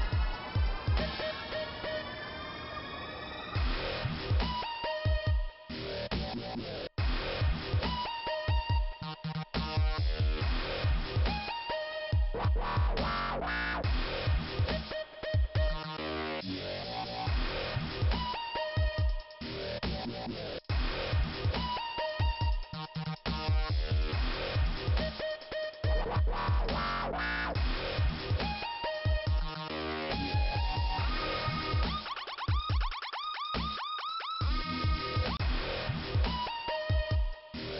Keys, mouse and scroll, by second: 0.6 click, 0.7 click, 5.8 click, 7.7 click, 7.8 click, 7.8 click, 7.9 double click, 12.3 middle click, 13.4 click, 13.4 click, 13.6 double click, 14.3 double click, 16.7 middle click, 18.3 click, 18.4 click, 18.4 click, 18.5 double click, 19.1 click, 19.2 click, 19.6 double click, 21.1 click, 21.3 click, 26.7 middle click, 27.3 scroll down 1, 29.4 click, 29.4 click, 31.0-31.7 scroll up 2, 31.7 click, 31.7 click, 31.8 click, 31.9 click, 33.3 click, 33.4 click, 35.0 click, 35.1 click, 35.2 click.